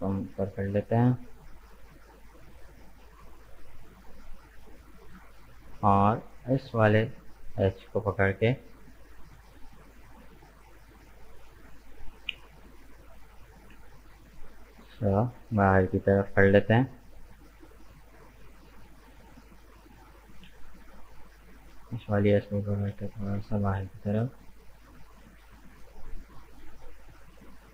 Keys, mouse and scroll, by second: 2.6-5.8 middle drag, 5.8 right click, 6.9-8.1 drag, 8.1 right click, 8.7 shift+right click, 9.0 middle click, 9.9 shift+right click, 10.3 shift+right click, 10.6-12.0 middle drag, 12.0 g, 15.7-18.0 middle drag, 18.0 right click, 18.6 shift+right click, 19.1 shift+right click, 19.5 middle click, 20.2 shift+right click, 20.6-22.6 middle drag, 22.6 g, 26.5-27.7 middle drag.